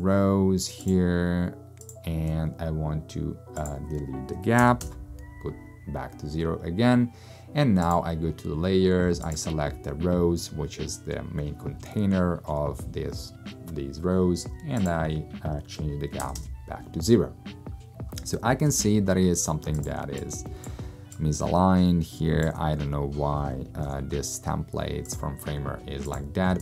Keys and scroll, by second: 4.7 0, 4.9 Return, 16.2 0, 16.4 Return, 20.0 space, 23.5 super+space, 23.9 super+-.